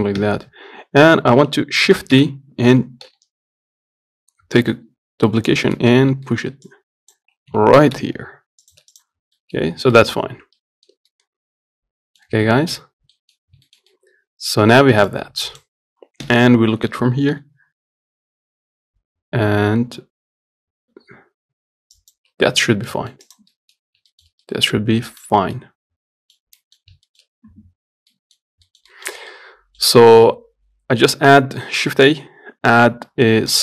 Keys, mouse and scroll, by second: 0.5 KP_7, 2.2 shift+d, 6.2-6.5 scroll up 2, 6.5 shift+middle click, 6.9 click, 7.8 g, 9.2 click, 9.4 scroll down 2, 9.6 middle click, 9.9 scroll up 2, 10.2 shift+middle click, 10.5-10.8 scroll down 1, 10.8-12.6 middle drag, 12.6 scroll up 2, 12.8 shift+middle click, 13.2 scroll down 2, 13.4 middle click, 13.7 scroll up 1, 13.9-15.3 shift+middle drag, 15.3-16.5 drag, 16.5 KP_7, 17.6 g, 22.9 scroll down 3, 23.2 middle click, 23.5 click, 23.8 middle click, 24.0-24.4 scroll up 1, 24.4-30.4 shift+middle drag, 30.4 shift+a, 32.2 shift+a.